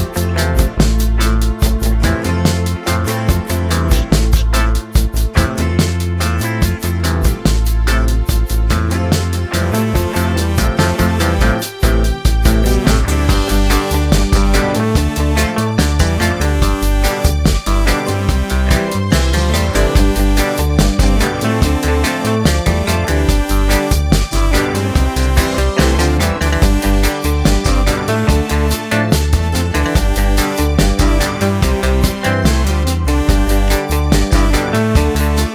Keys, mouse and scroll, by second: 2.3 middle click, 3.2 scroll up 1, 3.3 middle click, 3.9-5.2 drag, 5.2-6.2 middle drag, 6.8 scroll down 1, 7.0-7.7 scroll up 1, 7.7-9.0 drag, 9.0 middle click, 9.3 space, 13.2 space, 13.8-14.9 drag, 15.8-16.8 middle drag, 17.0 scroll down 1, 17.1-18.9 middle drag, 19.5 click, 20.1 middle click, 20.6-21.7 drag, 22.9-23.9 middle drag, 24.6 click, 24.8 middle click, 25.7 Tab, 26.2 Tab, 27.5 Tab, 28.9 click, 29.5 middle click, 29.7 Tab, 30.0 middle click, 30.6 2, 31.2 click, 32.5-33.5 drag.